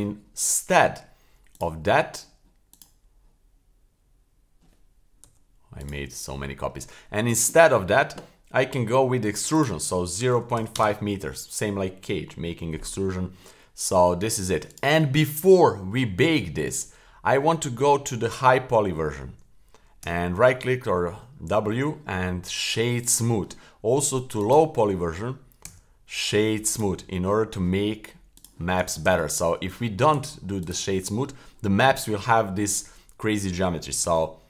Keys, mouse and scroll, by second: 1.5 click, 2.7 click, 5.2 Delete, 5.8 click, 6.0 Delete, 9.5-10.7 drag, 14.7-17.7 right drag, 20.0 w, 24.4 click, 25.7 w, 27.2-28.3 scroll up 2, 28.3 click, 29.1 super+z, 29.5-30.1 scroll up 1, 30.1 super+z, 30.6 click, 34.0 w.